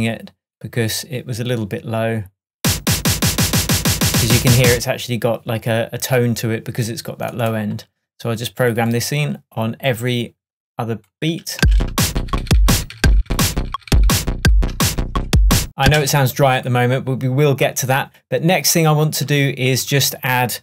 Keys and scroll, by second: 11.6 space, 15.0 shift+super+d, 15.0 shift+super+Tab.